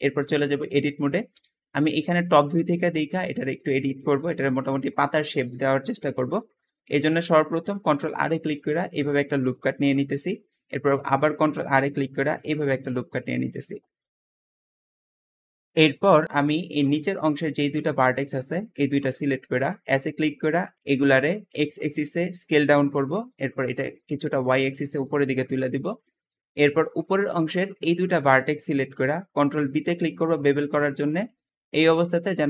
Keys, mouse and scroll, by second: 0.9 KP_7, 2.0-2.4 shift+middle drag, 2.4 scroll up 4, 2.9-5.7 shift+middle drag, 5.7 scroll up 1, 7.6 ctrl+r, 9.1-9.8 scroll up 1, 9.8-11.3 scroll down 1, 11.3 ctrl+r, 11.3 scroll down 1, 13.3 Tab, 13.6 scroll down 2, 14.2 g, 14.5 click, 14.7 shift+middle drag, 14.8 Escape, 14.9 shift+middle click, 15.1 Tab, 15.4 shift+middle click, 15.6-16.1 scroll up 2, 16.1 shift+click, 16.6-17.6 shift+middle drag, 17.6 shift+click, 18.1-19.8 shift+middle drag, 19.8 s, 20.8 s, 22.7 click, 23.9 click, 26.1 shift+middle click, 26.8 shift+click, 27.7 shift+click, 29.6 ctrl+b.